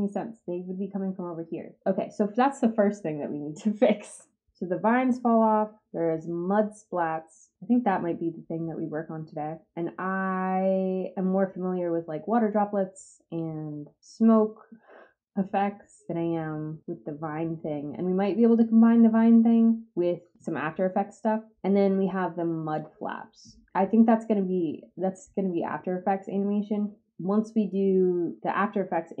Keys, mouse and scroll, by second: 4.4-22.7 drag, 27.0-29.2 drag.